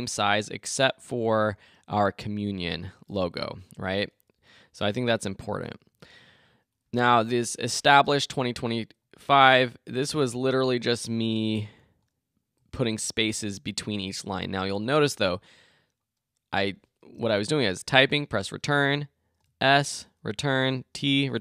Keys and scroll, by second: 3.4 Up, 3.7 Left, 4.4 Up, 9.3 Return, 11.0 Return, 18.2 shift+Return, 18.8 Return, 19.9 shift+Return, 20.7 Return, 21.1 Return.